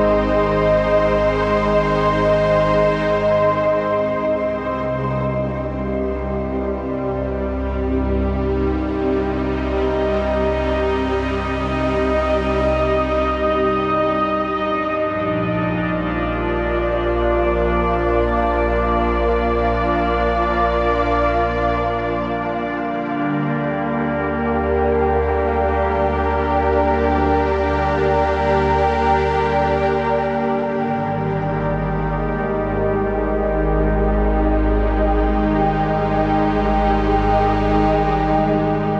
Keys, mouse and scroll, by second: 0.9 shift+Return, 1.4-4.6 typing, 6.9-8.0 typing, 8.6 click, 13.4-17.0 drag, 17.0-18.1 typing, 17.2 click, 17.9 click, 18.1 click, 21.1 scroll down 1, 21.7 click, 22.5-23.5 scroll up 1, 23.5 right click, 24.7 click, 27.0 typing, 27.4-35.6 alt+shift+drag, 37.3 Return.